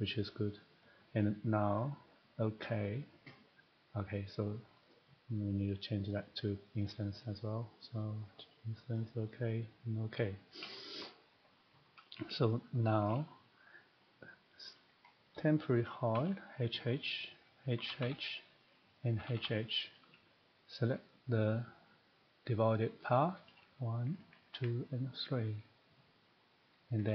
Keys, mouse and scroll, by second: 0.5 click, 1.7 click, 2.6 click, 4.8 click, 6.1 click, 6.8 click, 8.2 click, 8.9 click, 9.7 click, 12.1 middle click, 13.1 shift+middle click, 14.7 click, 15.1 middle click, 15.2 middle click, 15.4 scroll, 15.7-16.1 typing, 15.9 shift+scroll, 17.1-17.8 scroll, 17.6 click, 17.8 typing, 19.1 click, 19.2 h, 19.4 h, 21.1 click, 22.7-23.2 typing, 24.6 ctrl+click, 26.7 click.